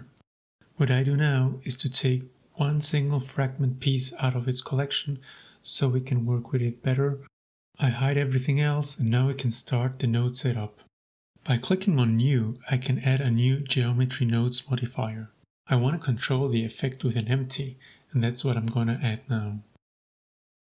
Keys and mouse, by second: 2.3 middle click, 2.5-2.9 shift+middle drag, 3.9 right click, 4.8 m, 8.5-8.9 drag, 9.5-10.0 middle drag, 10.8-11.5 drag, 11.7 click, 11.9-12.8 drag, 12.9-13.4 middle drag, 14.1 shift+drag, 14.2 shift+middle click, 15.0 click, 15.8 shift+a, 19.8 shift+middle click, 20.5 right click.